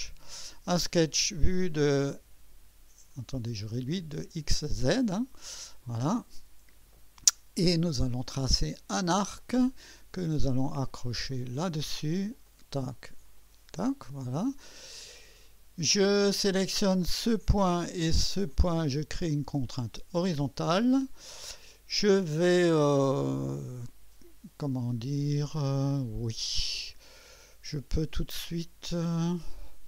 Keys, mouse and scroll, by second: 0.0 click, 4.8 click, 6.1 click, 9.4 click, 11.3 click, 12.5 click, 13.4 click, 17.2 click, 18.5 click, 19.7 click, 25.5-27.0 drag.